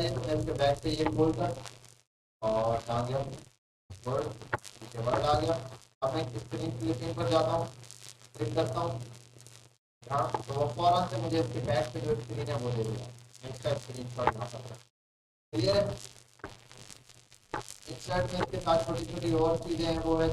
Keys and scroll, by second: 3.9 alt+Tab, 15.7 Delete.